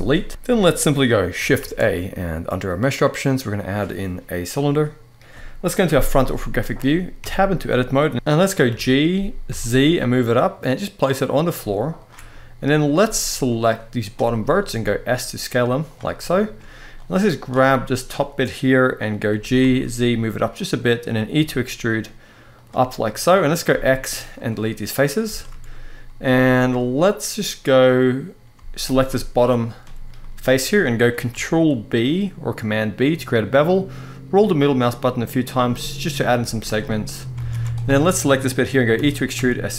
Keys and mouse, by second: 0.3 middle click, 1.3 shift+a, 5.6 KP_1, 6.9 Tab, 8.1 g, 8.4 g, 9.2 z, 12.7 z, 13.5 click, 14.4 s, 15.6 click, 16.8 click, 19.0 g, 19.3 z, 20.3 click, 21.0 e, 22.2 click, 22.7 middle click, 23.4 x, 25.0 shift+middle click, 28.6 alt+shift+click, 29.9 middle click, 31.0 ctrl+b, 35.5 middle click, 36.1 z, 37.1 alt+a, 38.7 e, 39.1 s.